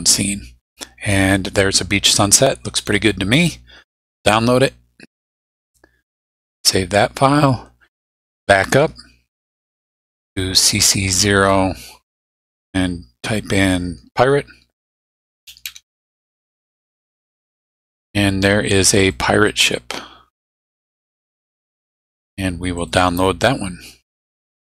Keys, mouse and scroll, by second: 2.1 click, 3.9 click, 6.2 click, 8.6 click, 10.8 click, 14.2-16.2 typing, 19.0 click, 22.8 click.